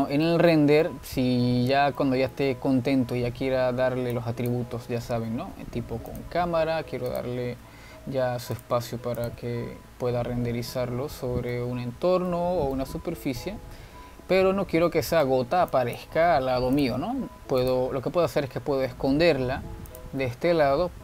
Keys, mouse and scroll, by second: 1.0-1.4 scroll down 2, 1.4-2.4 middle drag, 2.4-3.1 scroll up 2, 3.1-5.3 shift+middle drag, 5.3 click, 6.3 shift+a, 8.2 click, 8.8 n, 10.9-11.5 scroll down 4, 11.5-12.4 scroll down 9, 12.4-13.2 shift+middle drag, 13.2-13.6 scroll up 2, 13.6-14.3 shift+middle drag, 14.3-14.6 scroll down 1, 14.6-16.9 shift+middle drag, 16.9 click, 18.1 click, 18.8 click, 19.7 g.